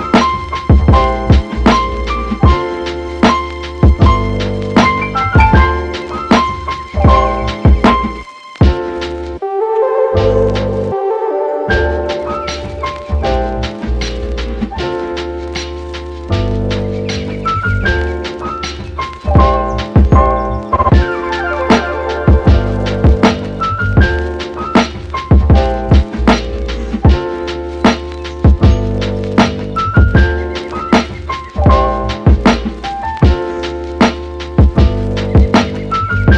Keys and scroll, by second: 7.6 super+s, 8.0 Right, 8.3 BackSpace, 8.5 6, 8.6 Return.